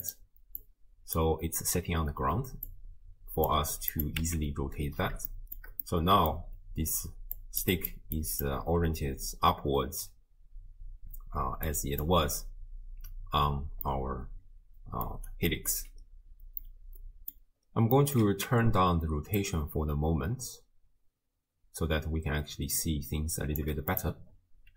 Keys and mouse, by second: 0.6-1.2 drag, 2.7-3.5 drag, 3.9 click, 4.3 x, 5.4 shift+middle drag, 5.9 click, 7.1 d, 7.4 click, 7.6 d, 7.7 click, 7.7-8.8 d, 9.1 d, 10.1-11.4 d, 11.7 click, 14.0-15.1 middle drag, 15.1 d, 15.3 right click, 15.7 d, 16.1 d, 16.6 click, 18.0 click, 19.4-23.6 shift+drag, 23.9-24.7 drag.